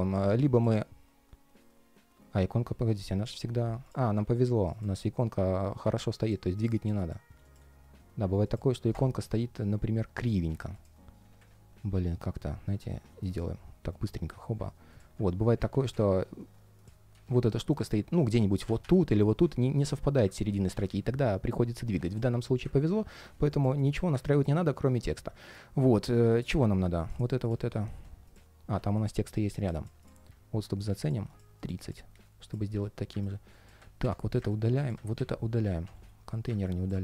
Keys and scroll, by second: 13.0 shift+super+g, 20.2 super+z, 27.7 super+z, 35.7 ctrl+shift+3.